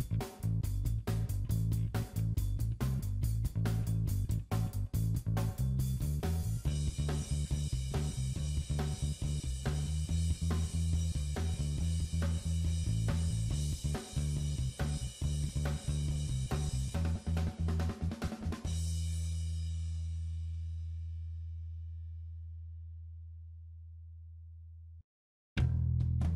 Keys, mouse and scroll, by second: 1.0 middle click, 4.5 click, 8.3 middle click, 9.9 click, 15.1-15.5 scroll down 2, 16.1 scroll down 1, 16.2 shift+click, 19.3 middle click, 21.1 middle click, 21.6 s, 23.9 middle click, 25.4 scroll up 1.